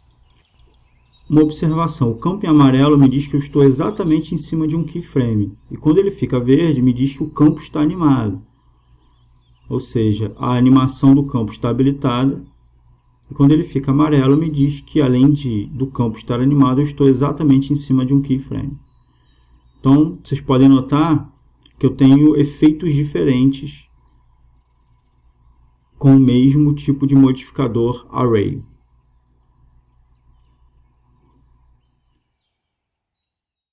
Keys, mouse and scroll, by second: 6.6-8.2 drag, 10.7-12.6 drag, 13.2-14.9 drag, 17.3-18.3 drag, 18.3 right click, 18.7 click.